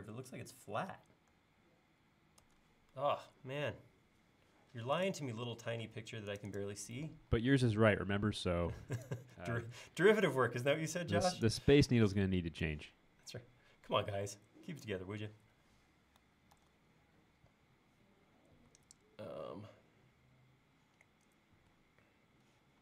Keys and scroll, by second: 2.5 super+Tab, 3.5 l, 5.9 space, 7.4 l, 11.8 p, 16.6 super+z.